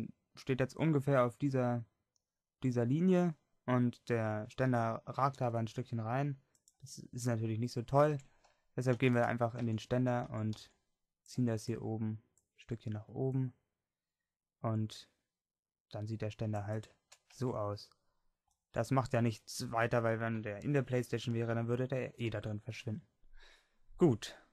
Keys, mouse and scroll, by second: 5.3 r, 8.2 Tab, 9.1 Tab, 9.7 Tab, 10.3 a, 10.6 c, 17.4 Tab, 20.5 click.